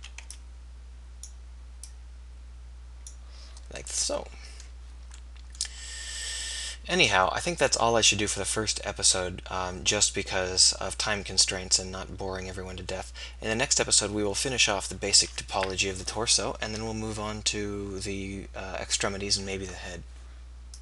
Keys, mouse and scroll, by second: 0.0 a, 0.2 b, 3.0 click.